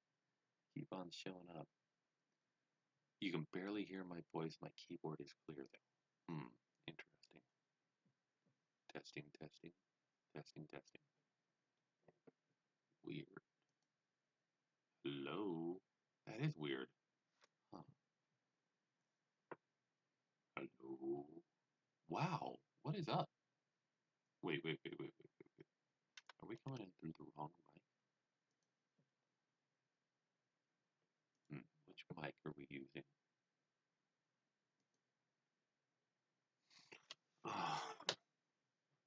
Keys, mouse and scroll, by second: 13.6 click, 13.7 click, 28.4 click, 31.3 click, 31.4 click, 34.7 click, 37.2 click.